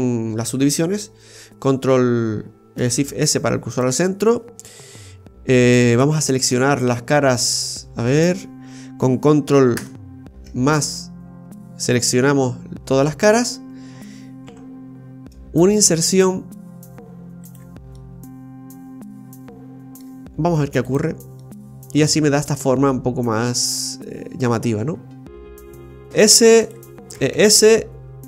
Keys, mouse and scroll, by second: 2.7 ctrl+s, 9.7 ctrl+KP_Add, 15.5 typing, 17.9 middle click, 20.8 click, 21.4 middle click, 25.2 middle click, 25.2 scroll down 4, 26.0 shift+s, 27.1 e.